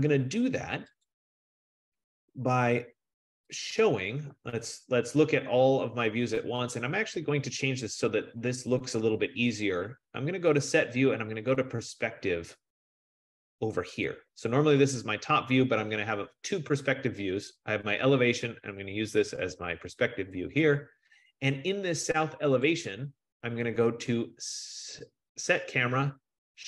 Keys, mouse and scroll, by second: 1.1 click, 3.7 click, 4.3 click, 7.8 click, 14.1 click, 15.3-17.8 scroll, 18.8-19.8 scroll, 22.7 click.